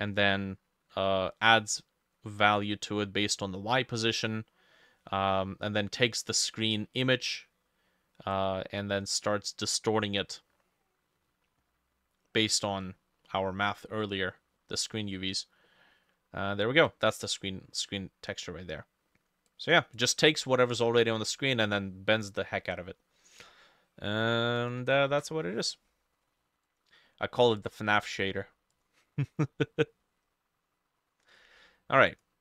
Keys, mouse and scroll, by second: 2.5 middle click, 5.9 middle click, 9.9 middle click, 12.8 middle click, 13.5 middle click, 14.4 middle click, 15.1 middle click, 15.7 middle click, 25.1 ctrl+s, 29.5 scroll down 1, 29.7 middle click, 30.2-32.4 scroll up 3.